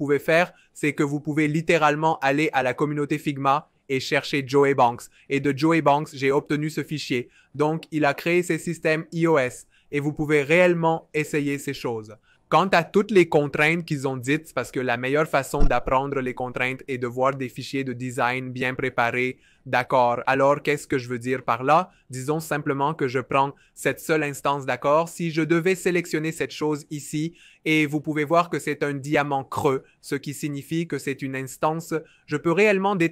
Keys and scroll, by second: 32.2 alt+super+b.